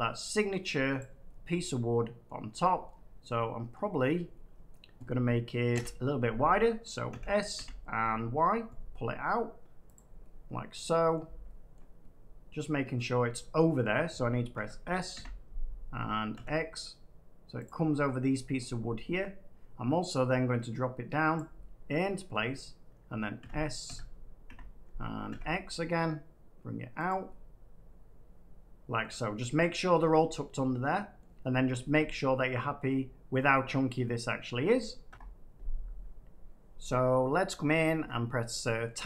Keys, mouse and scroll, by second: 0.9 click, 2.2-5.5 middle drag, 5.6 7, 6.4 7, 7.0 s, 8.3 y, 9.9 click, 11.1 middle click, 12.9 middle click, 13.5 middle click, 13.7 middle click, 14.5-16.3 typing, 17.6 click, 19.1 middle click, 21.3 click, 22.2 middle click, 23.3-25.2 typing, 27.0-28.0 drag, 28.9-29.9 middle drag, 31.1 middle click, 31.6 scroll down 4, 32.8 middle click, 33.3 middle click, 33.4 middle click, 33.5 middle click, 35.0 F9, 37.9 Tab, 38.8 middle click, 38.9 Tab.